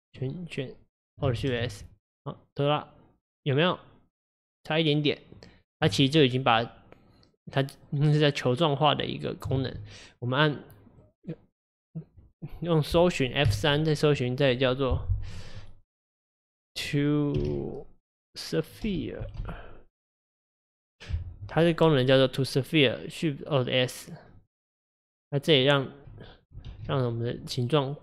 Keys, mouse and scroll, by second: 1.5 alt+shift+s, 7.5-9.6 middle drag, 9.6 ctrl+z, 10.2-10.8 scroll down 1, 10.8-13.6 middle drag, 13.6 F3, 26.8 ctrl+alt+s, 27.7 right click.